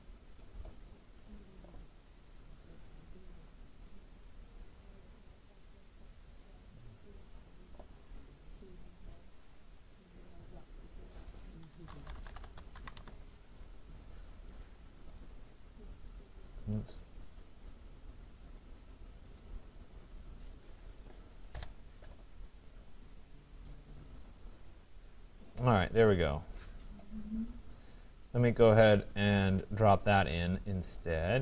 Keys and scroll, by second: 21.5 BackSpace.